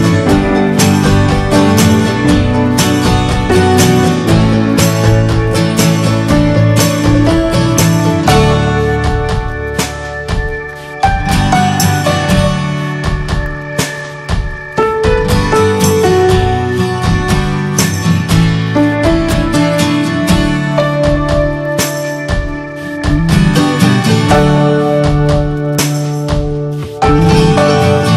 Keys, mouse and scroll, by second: 2.3-2.7 ctrl+scroll down 9, 2.7 ctrl+scroll up 1, 3.4-3.8 middle drag, 3.8 drag, 4.2 alt+middle click, 4.5-5.1 shift+middle drag, 5.1 click, 5.3-6.0 shift+middle drag, 6.0 r, 7.8-8.3 middle drag, 8.3 click, 8.4 scroll down 1, 8.5-9.0 middle drag, 9.0 drag, 9.6 click, 9.7-10.1 middle drag, 10.1 s, 11.5 click, 11.7 middle drag, 11.9-12.5 scroll up 3, 12.2 middle click, 12.5-13.1 shift+middle drag, 13.1 ctrl+s, 13.2 drag, 13.4 shift+middle click, 13.5 scroll up 1, 13.7-14.3 middle drag, 14.3 click, 14.6-17.0 shift+middle drag, 17.0 scroll down 2, 17.2-17.5 middle drag, 17.5 click, 17.9 s, 18.9 click, 19.1-20.1 middle drag, 20.1 ctrl+s, 20.5 scroll up 3, 20.6 scroll down 1, 20.7-21.8 shift+middle drag, 21.8 ctrl+s, 22.0-24.1 middle drag, 24.1 ctrl+s, 25.7-26.2 middle drag, 26.2 scroll up 3, 26.4-26.7 shift+middle drag, 26.9-28.1 middle drag.